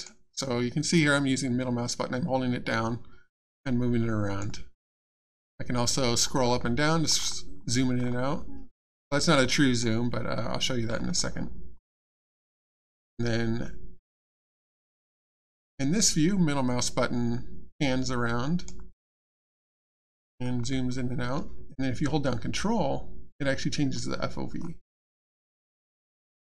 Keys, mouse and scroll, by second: 0.4 middle click, 5.0 scroll up 1, 5.7 scroll down 1, 6.3-6.7 scroll up 1, 6.7-7.1 scroll down 1, 7.1-7.5 scroll up 1, 7.5 scroll down 1, 8.0 scroll up 1, 8.3 scroll down 1, 9.1-9.5 scroll up 1, 9.5 middle click, 10.3 scroll down 1, 10.9 scroll up 1, 11.3 scroll down 1, 11.8 middle click, 13.2 middle click, 17.9 middle click, 20.0 scroll down 1, 20.4 scroll up 1, 20.8 scroll down 1, 22.6 ctrl+scroll down 1, 24.6-24.9 ctrl+scroll up 3, 26.0 ctrl+scroll up 1.